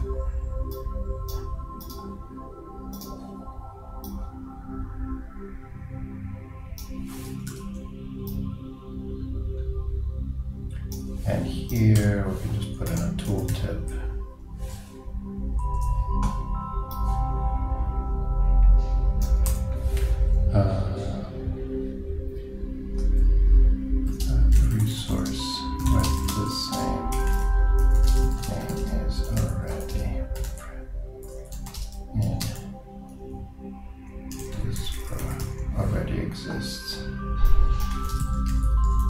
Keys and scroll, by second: 7.5 super+d, 24.1 shift+a, 24.3 shift+space.